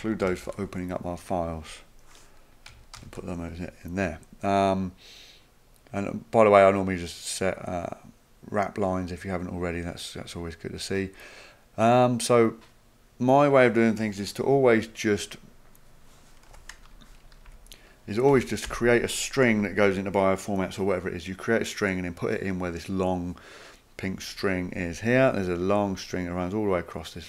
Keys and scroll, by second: 0.2 ctrl+c, 2.9 ctrl+v, 16.5 Home, 16.9 Return, 17.4 Up, 18.3 Tab, 18.7 Tab.